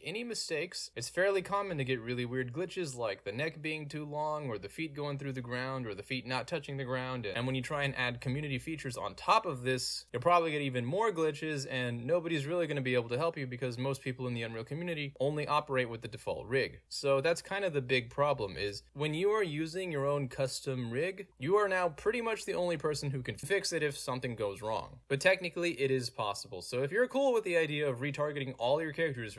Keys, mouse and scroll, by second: 0.6 middle click, 2.6-4.3 middle drag, 3.1 scroll down 1, 5.5 middle click, 5.5 scroll down 2, 5.5 scroll up 2, 6.0 middle click, 6.0 scroll up 2, 6.1-6.6 scroll down 2, 7.3 w, 21.3-23.8 typing, 25.4 click, 28.9-29.3 drag, 28.9 w.